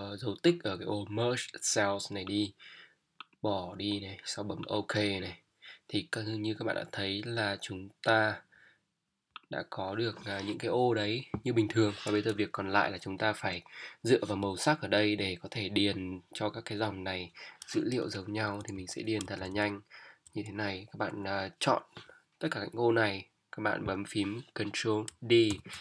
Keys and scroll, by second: 18.4 Down, 19.2 shift+Up, 19.4 shift+Down, 25.5 ctrl+d.